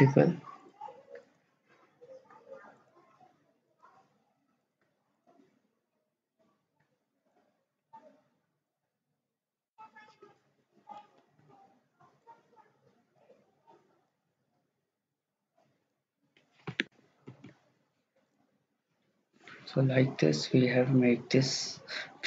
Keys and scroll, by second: 10.4 Escape, 10.8 Escape, 11.0 Escape, 11.2 Escape, 11.4 Escape, 17.3 ctrl+z.